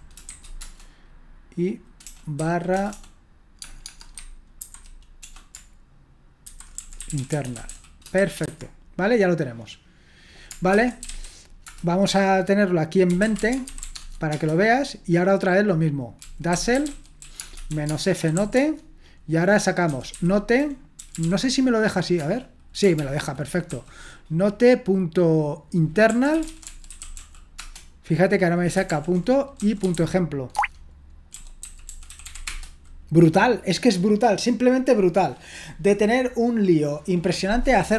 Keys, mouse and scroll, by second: 0.0-0.8 typing, 2.0-5.1 typing, 6.2-8.7 typing, 10.8-11.6 typing, 11.7 Return, 13.0-14.3 typing, 16.0-21.9 typing, 22.2 Return, 22.9 ctrl+p, 23.4-24.2 typing, 25.9-27.7 typing, 28.9 ctrl+p, 29.3-32.8 typing, 30.5 Tab.